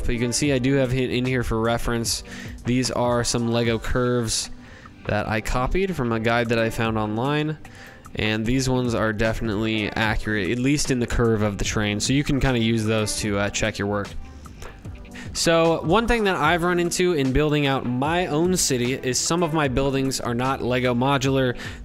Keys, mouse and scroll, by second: 0.7 click, 1.4 click, 2.5 Delete, 6.8 click, 7.3 click, 8.3 click, 10.9 ctrl+z, 12.0 click, 12.3 ctrl+z, 13.0-13.6 scroll, 14.2-14.9 scroll.